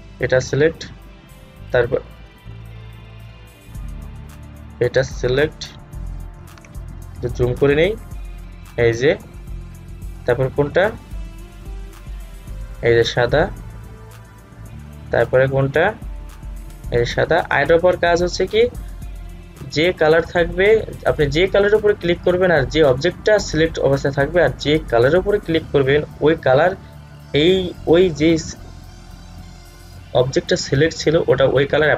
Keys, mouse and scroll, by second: 4.7 click, 7.4 alt+scroll up 1, 8.7 click, 12.6 click.